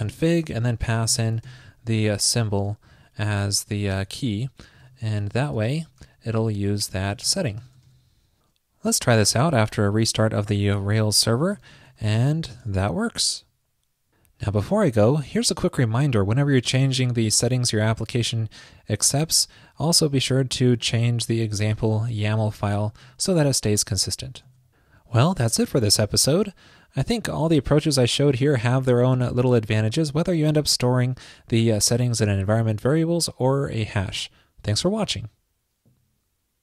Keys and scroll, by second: 2.0 super+Right, 3.9 alt+shift+Left, 7.9 super+s, 18.9 super+c, 23.0 super+v, 24.5 super+s.